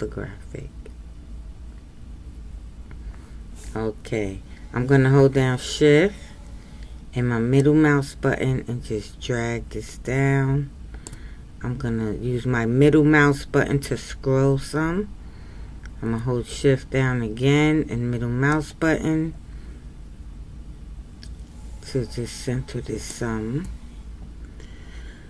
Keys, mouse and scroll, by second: 2.1-3.1 scroll up 1, 3.1-7.9 scroll up 4, 7.9-10.6 shift+middle drag, 13.6 scroll up 1, 14.7-18.6 scroll up 2, 18.6-21.8 shift+middle drag.